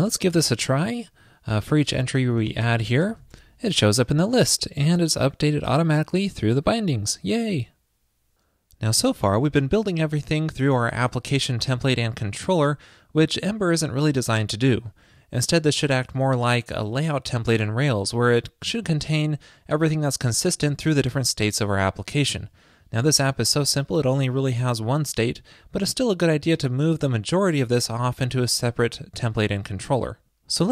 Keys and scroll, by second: 30.0 super+x.